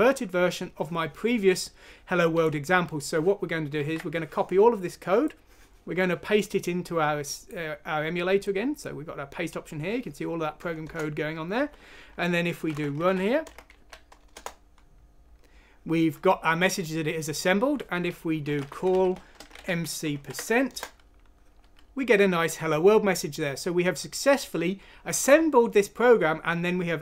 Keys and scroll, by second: 3.7 ctrl+c, 10.8 Return, 12.4-13.7 typing, 14.3 Return, 14.9 typing, 18.2-22.5 typing, 20.7 Return.